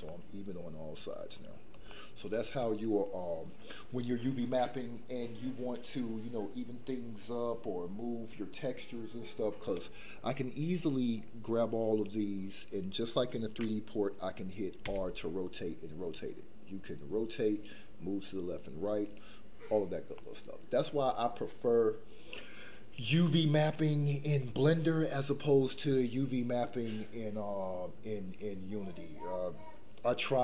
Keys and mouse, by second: 0.0-1.7 middle drag, 1.9 shift+middle click, 11.4-12.2 drag, 14.8 r, 20.1 middle click.